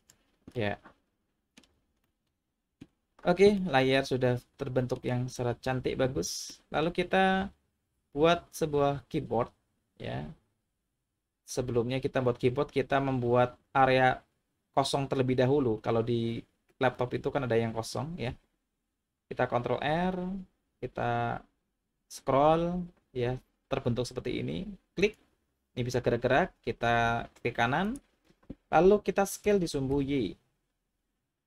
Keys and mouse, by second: 0.0 click, 0.5-1.6 middle drag, 2.0 middle click, 3.6-5.0 middle drag, 6.5 middle click, 19.9 ctrl+r, 27.9-28.8 right drag, 29.4 s, 29.9 y.